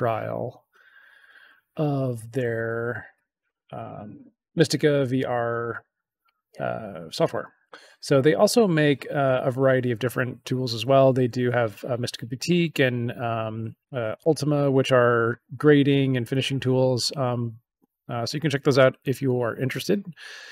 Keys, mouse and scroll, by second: 2.5 click, 3.7 click.